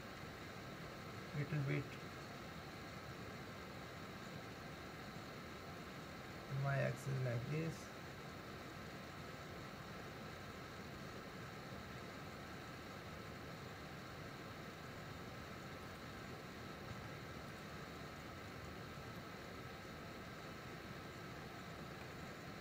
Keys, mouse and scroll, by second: 16.9 Tab, 18.4 scroll down 3, 19.2-22.3 middle drag.